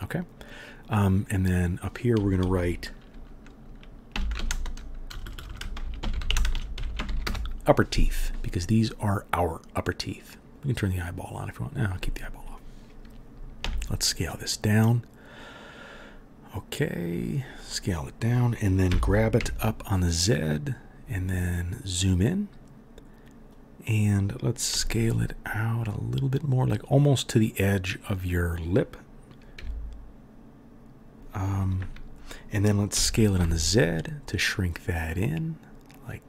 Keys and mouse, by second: 1.3 click, 5.2 BackSpace, 5.3 click, 5.3 right click, 5.3 BackSpace, 6.1 p, 6.5-10.6 shift+drag, 6.5-14.0 shift+right drag, 6.8 e, 8.3-10.6 middle drag, 11.3 click, 11.3 middle click, 13.6 s, 14.0 click, 14.1 right click, 14.2-36.2 drag, 18.9 g, 24.7 s, 29.5 s, 32.9 s.